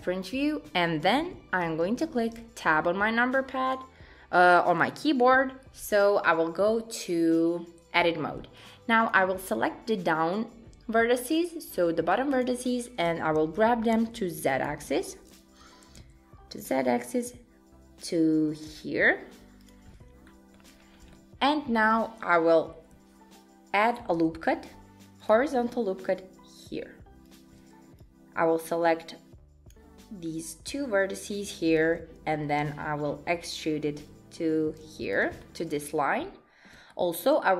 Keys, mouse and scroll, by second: 1.7 Tab, 3.4 click, 8.6 click, 12.1 click, 13.1 g, 15.6 g, 20.3 shift+middle click, 20.7-21.1 scroll up 3, 21.1 shift+middle click, 24.0 ctrl+r, 28.0 click, 30.4 click, 32.6 e, 35.4 shift+middle click.